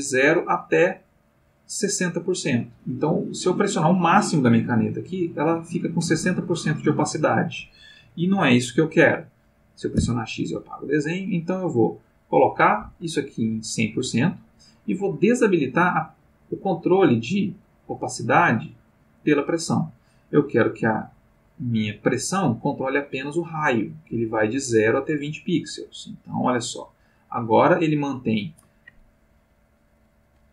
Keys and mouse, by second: 3.5-6.2 drag, 9.9 x, 10.4 click, 12.0 click, 12.9 Escape, 13.4 click, 18.9 click, 25.9-28.4 drag, 29.2-30.5 drag.